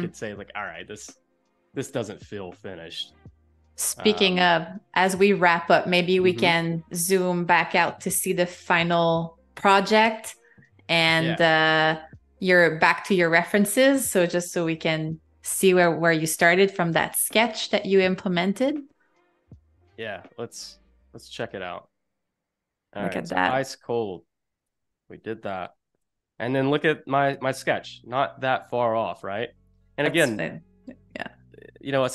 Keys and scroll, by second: 2.6 z, 3.9 a, 8.2 shift+super+[, 9.6 i, 13.1 a, 15.8 -, 18.1 super+-, 19.1 a, 19.5 space, 20.8 super+-, 21.5 space, 23.4 v, 23.9 space, 26.2 super+-, 26.8 space.